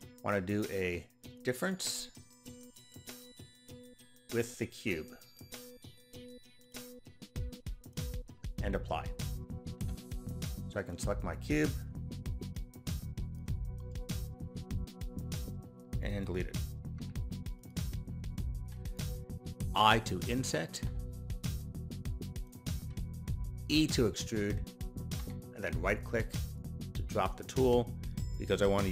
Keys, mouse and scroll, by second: 1.3 click, 3.2 click, 6.6 click, 7.8 click, 10.9 click, 12.5 click, 13.9-16.0 middle drag, 17.0 Delete, 17.5 click, 18.2 middle click, 22.4 click, 26.2 e, 26.4 right click.